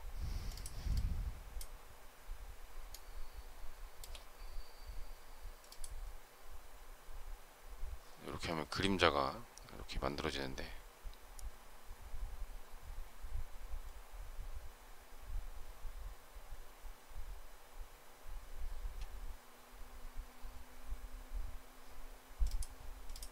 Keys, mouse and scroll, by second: 2.8 shift+middle click.